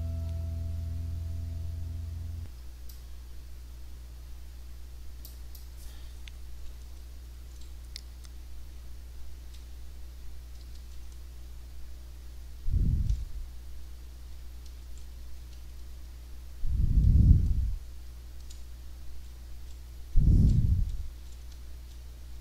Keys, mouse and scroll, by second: 2.8-5.4 drag, 5.5-15.5 drag, 6.9 d, 10.3-13.0 typing, 14.8 w, 17.8 w, 19.3-21.0 drag, 19.3 d, 20.3 s, 21.0 d.